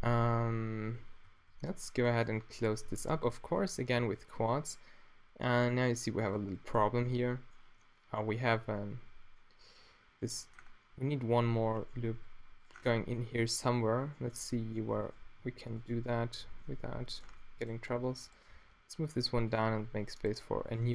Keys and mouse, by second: 1.0-4.0 typing, 6.5 z, 8.0 middle drag, 8.7 z, 11.6 a, 12.0 ctrl+r, 15.4 g, 16.5 z, 16.7 super+middle drag, 18.5 d, 19.4 super+click, 19.7 ctrl+r.